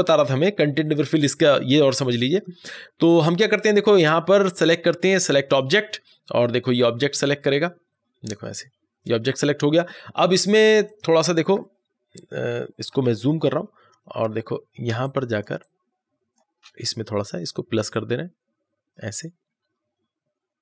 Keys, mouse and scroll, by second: 5.4 click, 10.8 click, 10.8 click, 13.0 ctrl+=, 13.9 ctrl+=, 14.8 space, 14.9 click, 15.3 space, 15.5 click, 15.7 space, 17.6-20.6 drag.